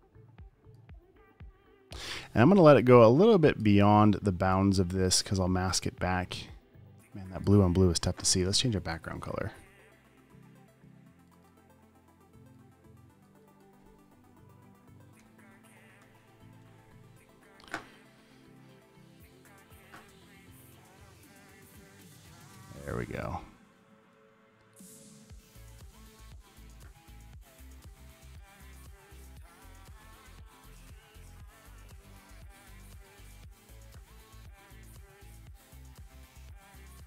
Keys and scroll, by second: 15.5 Return, 16.3 alt+BackSpace, 17.0 v, 20.4 super+t, 26.7 space, 27.0 space, 33.8 space, 34.2 space.